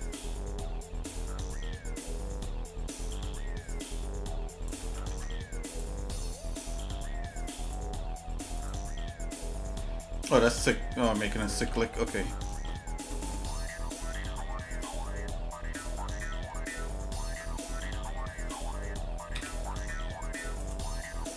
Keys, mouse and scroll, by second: 3.1 click, 3.8-4.8 drag, 4.9 ctrl+z, 5.7 click, 7.8 click, 8.6 click, 10.3-11.6 drag, 11.6 ctrl+z, 12.2 middle click, 12.7 shift+middle click, 13.2 middle click, 13.9 scroll down 1, 14.3 middle click, 14.8 shift+middle click, 15.7 shift+middle click, 17.2 Tab, 18.2 middle click, 19.3 a, 19.7 middle click, 20.6-21.3 right drag.